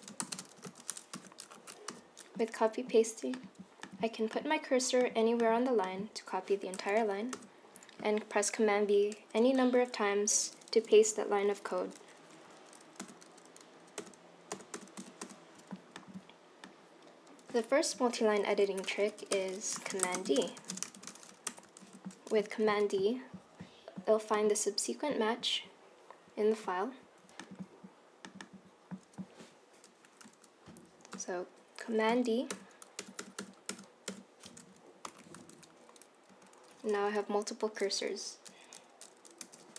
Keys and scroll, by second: 0.0-1.2 typing, 2.4-3.1 typing, 7.4 super+c, 13.1 super+v, 14.1 super+v, 14.6 super+v, 14.8 super+v, 15.1 super+v, 15.3 super+v, 18.5 super+c, 18.7 End, 19.2 Return, 19.4 Return, 19.5-21.0 typing, 21.6 Return, 21.9 super+v, 32.6 super+d, 33.1 super+d, 33.3 super+d, 33.5 super+d, 33.8 super+d, 35.2 Left, 36.4 Right, 39.5 BackSpace.